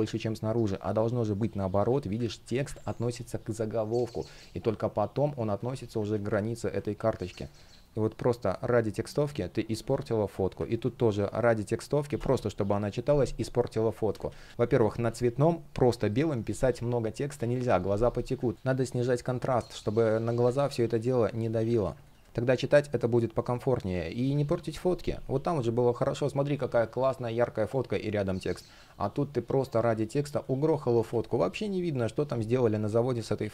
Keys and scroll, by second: 1.3 super+z, 5.7 super+z, 6.9 space, 7.8 shift+p, 10.3 super+z, 13.7 super+z, 18.5 space, 21.4 alt+super+c, 21.9 alt+super+v, 22.2 space, 23.7 shift+p, 30.7 super+z, 31.1 space.